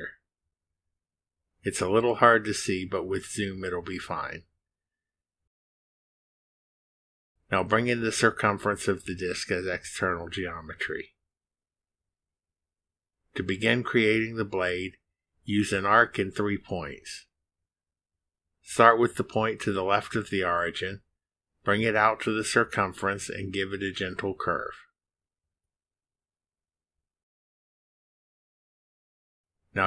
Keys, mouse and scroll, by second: 0.4 click, 2.1 click, 3.4 click, 4.9 1, 5.6 click, 9.7 click, 11.7 click, 13.1 scroll down 1, 14.8 scroll up 1, 15.7 click, 16.4 middle click, 16.7-17.0 scroll up 1, 21.8 click, 22.4 click, 24.3 click, 26.4 click, 29.1 click.